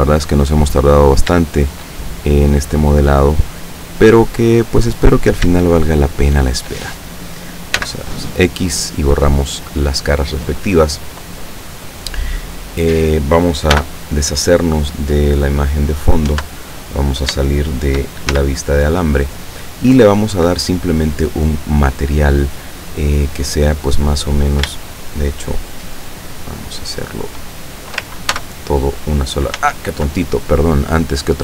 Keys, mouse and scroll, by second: 1.2 right click, 1.6 shift+right click, 2.3-3.6 shift+drag, 4.5 click, 5.3 right click, 5.9 shift+right click, 6.4 shift+right click, 7.9 x, 8.5 click, 9.9 scroll down 2, 13.8 n, 15.4 click, 16.3 Tab, 17.5-18.2 shift+middle drag, 18.4 shift+z, 21.5 click, 22.2 click, 24.9 shift+right click, 25.9 shift+right click, 26.4 shift+right click, 28.4 ctrl+shift+j, 29.6 ctrl+z.